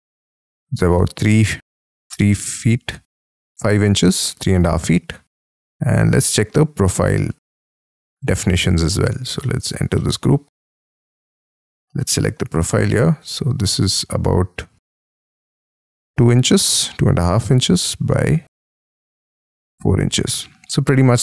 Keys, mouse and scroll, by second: 0.9 space, 1.3-2.1 scroll up 12, 2.6-3.4 scroll down 13, 3.4 t, 5.0-5.5 scroll up 12, 5.6 middle click, 6.5-7.3 scroll down 14, 7.3 space, 8.4 double click, 9.3 middle click, 9.8 scroll down 1, 9.9 middle click, 10.6 shift+scroll up 1, 10.7 shift+middle click, 11.2 shift+scroll up 1, 11.3 shift+middle click, 11.8-12.5 scroll up 10, 12.5-12.9 scroll down 3, 12.9 t, 13.9 Escape, 16.4 t, 19.5 space, 20.0-21.1 scroll down 14, 21.1-21.2 scroll up 25.